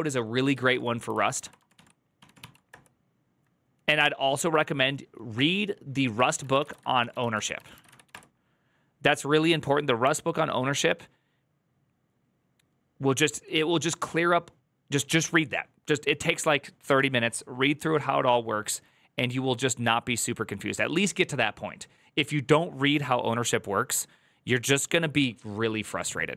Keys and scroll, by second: 0.7-2.8 typing, 6.1-8.5 typing.